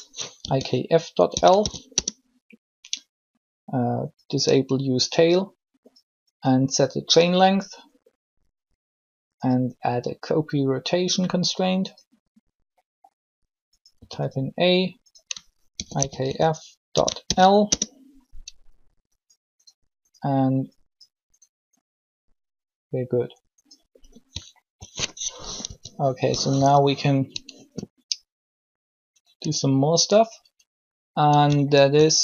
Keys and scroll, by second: 0.2 shift+f, 1.2 ., 1.3 shift+l, 1.9 Return, 13.9 a, 15.7-17.2 typing, 17.6 Return, 25.4 alt+shift+1, 26.5 3.